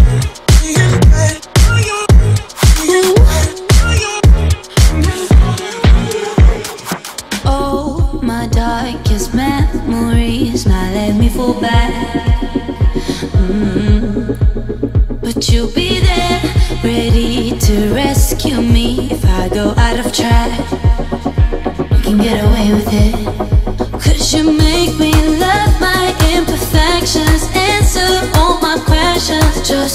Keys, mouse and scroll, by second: 0.5 click, 0.8 space, 1.0 scroll down 1, 2.2 shift+middle click, 3.7-4.5 scroll up 1, 5.7 click, 6.2-6.9 scroll up 1, 6.9 p, 7.0 click, 7.9 1, 8.5 shift+', 8.6 Return, 9.0 space, 9.2 scroll down 1, 9.6 click, 9.6 space, 10.2-10.5 scroll up 1, 11.0-14.7 middle drag, 14.7 scroll down 1, 15.1-16.7 shift+middle drag, 16.7 click, 17.3 shift+click, 18.7 m, 19.2 click, 20.6 Right, 22.1-23.4 typing, 23.1 Return, 24.9 ctrl+z, 26.0 m, 26.2 click, 27.2 Right, 27.4-28.8 typing.